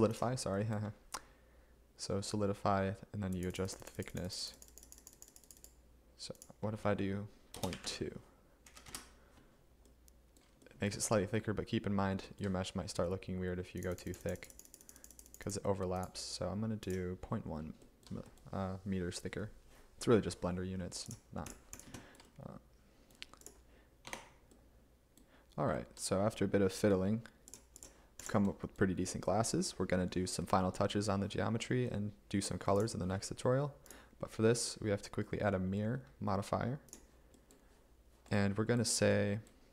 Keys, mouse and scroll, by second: 7.6 BackSpace, 7.8 BackSpace, 8.9 Return, 24.1 Tab.